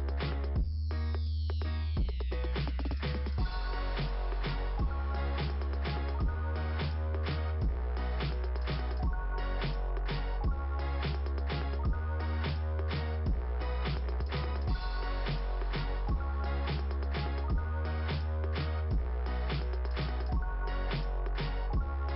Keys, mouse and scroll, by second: 0.0 click, 2.7-3.7 scroll down 1, 3.9 right click, 4.7 click, 5.7 scroll down 2, 6.6 click, 7.6 click, 11.4 click, 15.1 click, 15.3 click, 18.1 scroll down 2, 19.7 click, 21.2 click, 21.9 click.